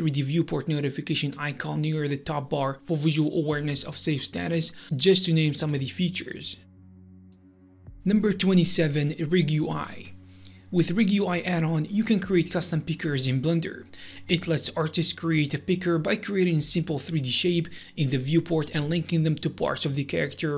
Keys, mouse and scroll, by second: 0.2 click, 0.7 click, 1.6 middle click, 2.6 click, 3.3 click, 3.8 click, 4.7 click, 5.4 click, 6.2 click, 6.9 click.